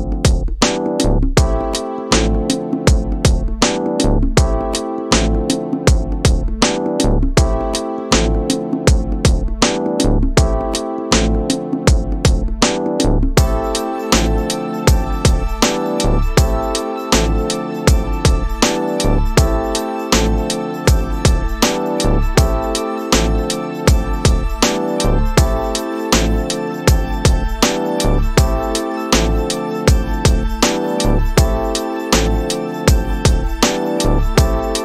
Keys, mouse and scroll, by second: 0.4 click, 1.3 click, 1.7 click, 2.3 click, 3.8 click, 5.2 middle click, 9.4 space, 15.4 space, 16.7 shift+Left, 19.6 space, 23.7 space, 25.2 click, 28.2 shift+Left, 30.1 space.